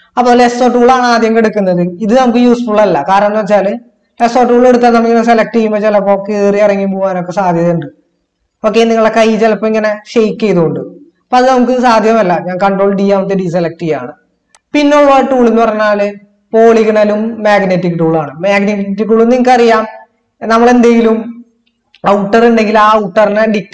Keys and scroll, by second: 13.4 ctrl+d.